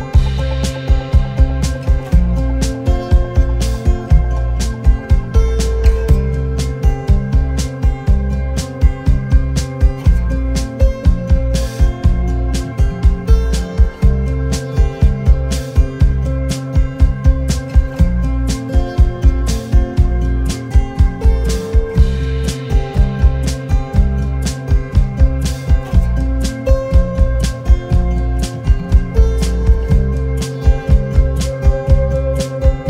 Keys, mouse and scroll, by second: 1.1 shift+click, 4.7 alt+scroll down 1, 5.8 alt+scroll up 1, 6.8 alt+scroll up 1, 7.7 alt+shift+click, 10.2 alt+scroll down 1, 11.0 alt+scroll down 1, 15.4 space, 18.7 ctrl+c, 18.9 ctrl+f, 20.1 double click, 25.7 ctrl+x, 27.3 double click, 28.2 ctrl+f, 29.2 double click, 29.6 alt+scroll down 1, 31.5 alt+scroll up 1, 31.9 space.